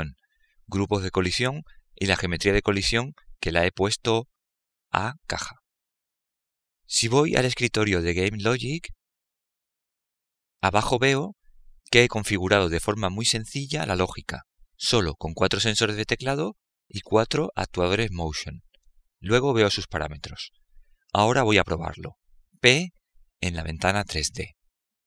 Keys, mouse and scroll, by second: 8.9-11.0 drag, 23.6 p.